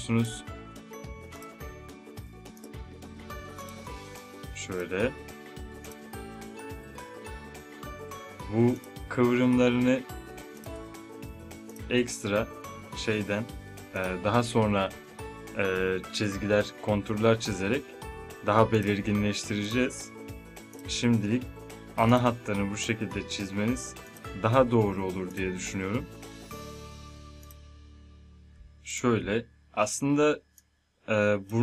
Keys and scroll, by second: 2.1 space.